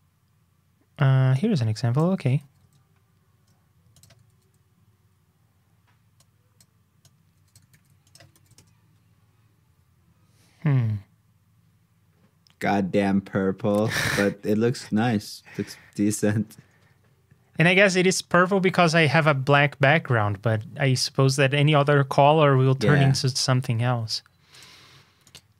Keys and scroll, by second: 2.3 super+c, 2.5 super+Tab, 4.3 super+v, 7.7 super+c, 8.3 super+v.